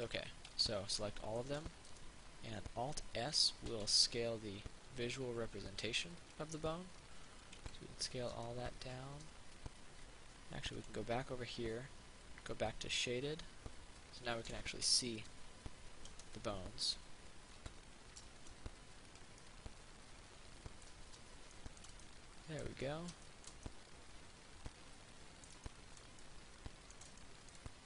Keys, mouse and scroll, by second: 0.4 a, 1.6 middle click, 3.9 alt+s, 6.5 click, 6.8 scroll up 1, 7.9 alt+s, 8.9 click, 14.2 scroll down 1, 16.3 Tab, 17.8 alt+s, 19.3 click, 19.7-21.7 middle drag.